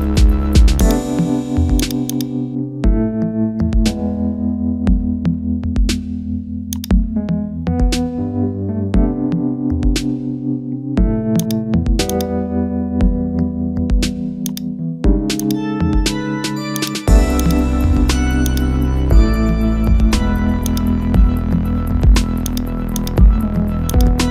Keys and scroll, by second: 3.1 ctrl++, 4.2 ctrl+-.